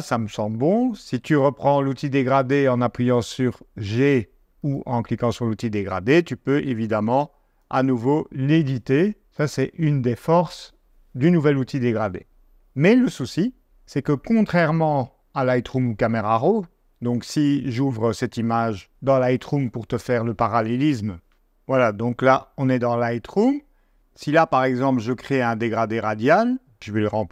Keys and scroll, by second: 21.8 i.